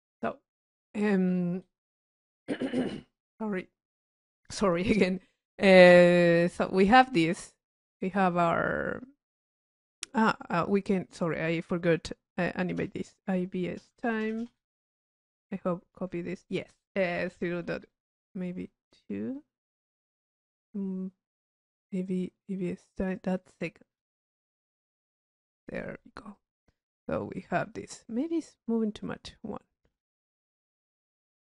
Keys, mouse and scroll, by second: 5.4 click, 6.7 click, 7.5 click, 9.3 middle click, 9.5 click, 11.0 click, 20.7 click, 26.5-26.8 drag, 28.4 click, 30.8 click.